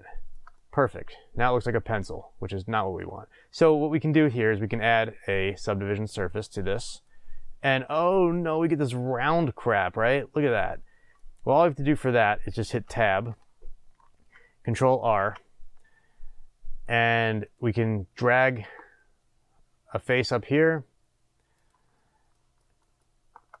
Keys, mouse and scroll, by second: 3.5 click, 4.9-8.3 drag, 8.3-12.3 middle drag, 12.8 Tab, 15.1 ctrl+r, 21.6 click, 22.3-23.6 shift+middle drag.